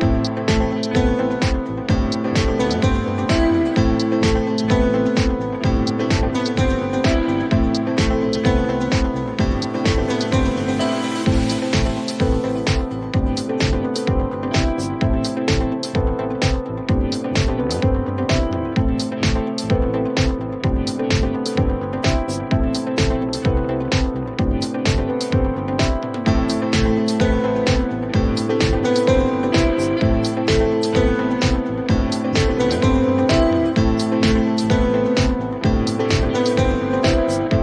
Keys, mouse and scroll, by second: 2.6 click, 4.9 click, 19.6 click, 21.5 click, 22.6 right click, 24.7 click, 25.2 typing, 26.7 typing, 28.2 click, 29.4 click, 29.9 click, 30.5 click, 31.4 click, 32.2-33.9 typing, 35.8 click, 35.9 click.